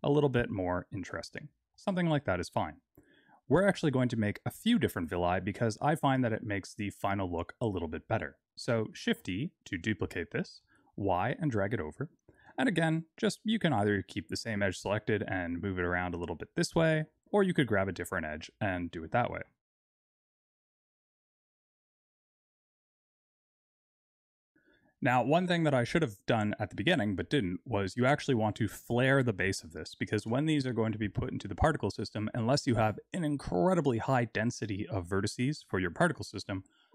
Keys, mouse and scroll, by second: 1.6 Tab, 9.0 shift+d, 12.3 Tab, 14.8 g, 19.3 Tab, 20.3 shift+d, 20.6 shift+d, 21.1 Tab, 21.5 alt+click, 21.8 g, 23.3 Tab, 23.4 click, 23.5 Tab, 23.8 alt+click, 24.0 g, 24.5 Tab.